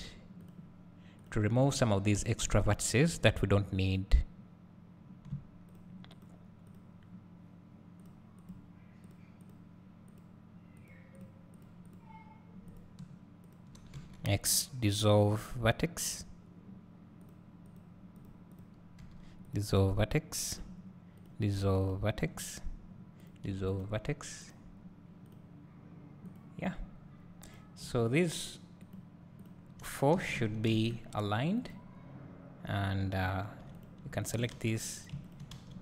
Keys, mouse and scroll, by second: 0.4 click, 1.6 shift+click, 2.6 scroll up 1, 3.1 scroll down 1, 3.7 scroll up 1, 5.7 shift+click, 15.3 x, 16.0-17.2 scroll up 1, 17.2 click, 21.2 click, 22.2 scroll down 1, 23.2 click, 24.5 click, 28.0 shift+click, 30.1 s, 33.0 2, 33.8 click, 34.2 shift+click, 34.6 f, 35.0 click, 35.3 shift+click, 35.5 f.